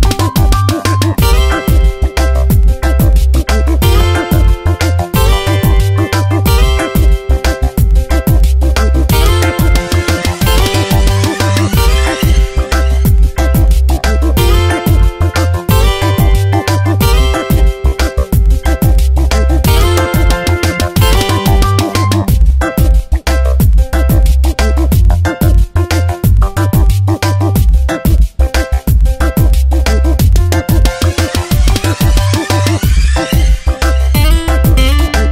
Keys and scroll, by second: 0.0 shift+s, 1.2 v, 5.5 space, 6.2 t, 7.4 shift+l, 8.9 ctrl+a, 9.8 ctrl+Return, 10.4 v, 12.7 Return, 14.4 ctrl+t, 16.3 Return, 16.7 v, 17.1 Tab, 18.7 space, 19.5 Tab.